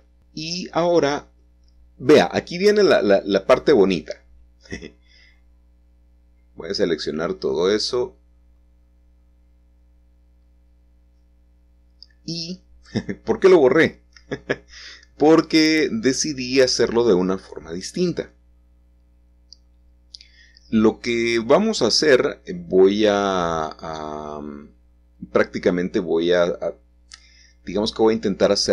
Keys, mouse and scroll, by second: 0.1-2.2 middle drag, 2.3-3.3 shift+scroll down 2, 2.6-3.7 shift+middle drag, 4.2-5.3 drag, 9.7 click, 10.3-11.2 scroll down 2, 11.2-12.2 shift+middle drag, 14.3-15.7 scroll down 2, 15.1-16.8 shift+middle drag, 17.5-19.0 shift+middle drag, 21.8 click, 22.7-24.2 middle drag, 24.2-25.3 shift+middle drag, 26.4 middle click, 26.7-28.7 scroll up 2, 27.6 shift+a.